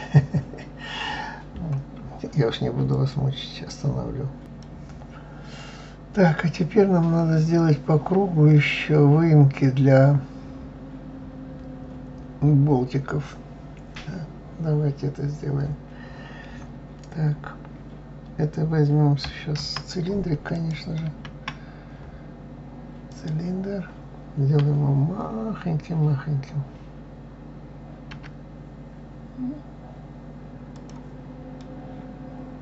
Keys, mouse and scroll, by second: 20.5 click, 20.9 shift+a, 31.5-32.6 middle drag.